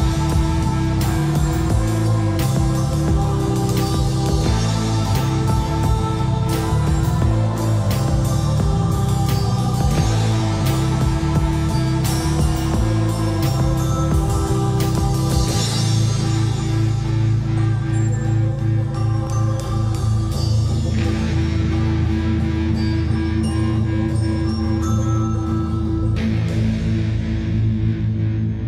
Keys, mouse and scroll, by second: 0.0-0.7 typing, 1.4 click, 3.9 middle click, 4.7 scroll down 1, 5.0 scroll up 1, 5.6-6.4 typing, 6.6 click, 9.0 typing, 9.4 click, 10.9 F8, 11.6 click, 11.9 F8, 12.3 scroll up 1, 12.6 middle click, 12.9 scroll down 1, 18.1-28.2 drag, 28.3 middle click.